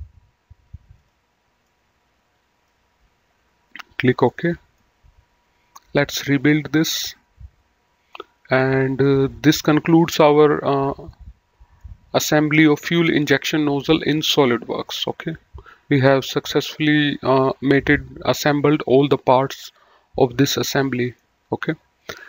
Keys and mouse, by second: 1.0 click, 1.6 middle click, 3.7 click, 4.3 middle click, 6.3 click, 7.0 middle click, 8.6 middle click, 11.2 middle click, 14.8 middle click, 16.8 middle click, 20.6 middle click, 22.1 middle click.